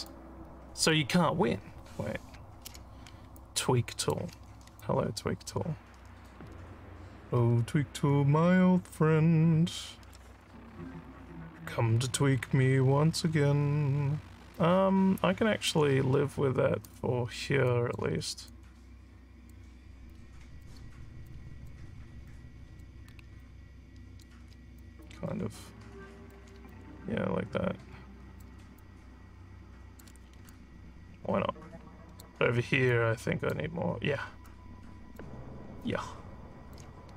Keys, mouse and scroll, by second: 0.1 click, 2.7 w, 3.4 click, 4.8-15.7 alt+drag, 16.8 click, 17.7 alt+click, 18.5-19.5 drag, 20.1 click, 21.2 click, 22.3 click, 23.4 alt+click, 24.8-26.3 drag, 26.7-28.3 alt+drag, 28.8-30.0 drag, 30.5-32.2 alt+drag, 32.9 click, 34.5 alt+click, 35.8 alt+click.